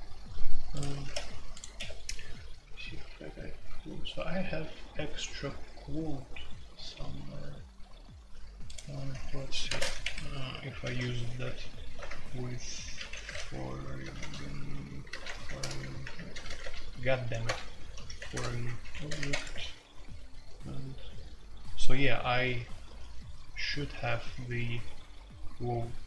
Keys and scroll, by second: 1.0 ctrl+g, 1.7 Escape, 9.2 Escape, 9.7-19.5 typing.